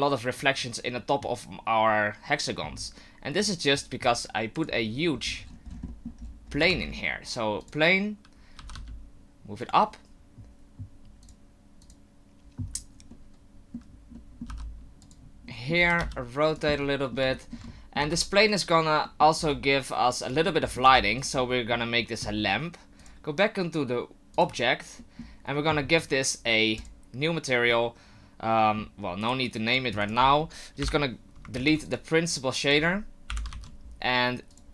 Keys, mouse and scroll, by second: 5.5-6.6 scroll down 12, 5.9 middle click, 6.7 shift+a, 8.6 g, 13.1 middle click, 14.1 middle click, 14.5 g, 15.5 middle click, 15.8 r, 16.7 middle click, 17.3 shift+middle click, 17.7 middle click, 18.0 g, 19.0 middle click, 19.4 r, 20.5 middle click, 20.8 g, 21.4 middle click, 23.0 click, 25.0 middle click, 26.8 click, 27.7 middle click, 29.5 click, 30.0 click, 30.8 Delete, 31.5 ctrl+z, 31.8 click, 32.3 click, 32.6 click, 33.3 Delete, 33.5 shift+a.